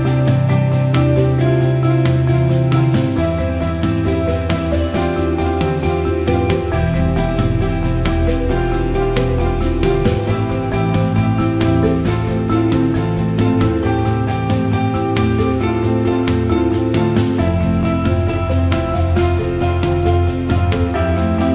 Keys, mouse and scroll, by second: 3.3 click, 5.9 ctrl+i, 7.0 click, 7.8 click, 8.0 click, 9.4 click, 10.1 click, 10.7-13.3 drag, 13.3 l, 14.5 click, 17.1 click, 18.0 click, 19.7-20.1 drag, 21.0 alt+middle click.